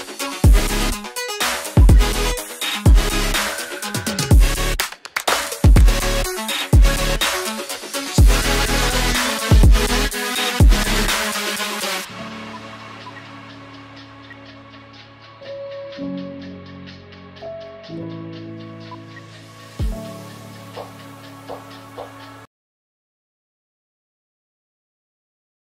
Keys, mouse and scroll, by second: 0.6 ctrl+click, 1.7 ctrl+z, 3.9 double click, 10.7 space, 11.7 ctrl+click, 12.9 ctrl+r, 13.7 ctrl+click, 14.1 ctrl+r, 14.5 ctrl+click, 15.7 scroll down 1, 16.6 double click, 19.0 shift+F2.